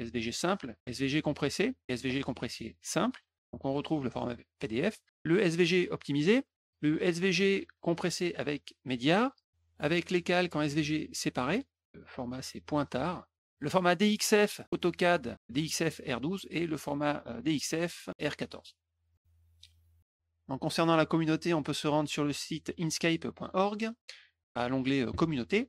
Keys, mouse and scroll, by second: 19.0 click, 19.7 click, 20.4 click, 25.0 alt+Tab.